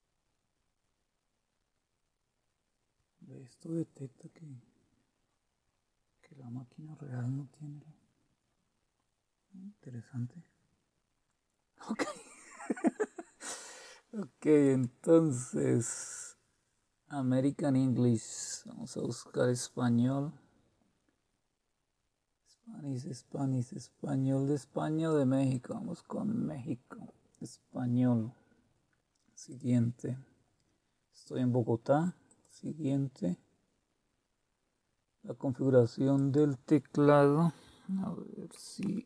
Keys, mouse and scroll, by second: 14.6 click, 18.1-24.6 scroll down 1, 25.5 click, 29.5 click, 32.3 click, 36.2 click.